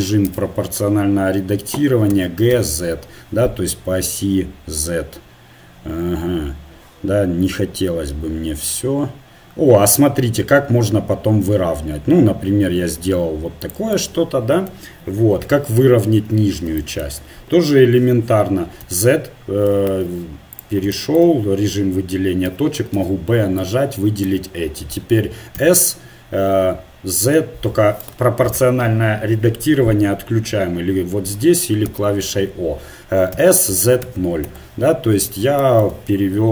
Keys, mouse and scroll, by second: 0.3 o, 2.1 g, 14.1 middle click, 15.5 KP_1, 18.9 z, 19.9 ctrl+Tab, 22.5 a, 23.0 b, 25.5 s, 31.9 o, 33.4 s.